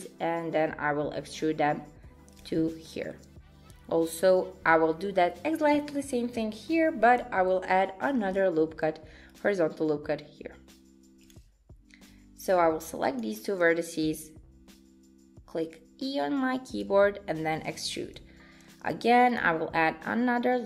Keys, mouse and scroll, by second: 2.9 shift+middle click, 8.2 ctrl+r, 12.1 click, 14.1 e, 18.7 ctrl+r.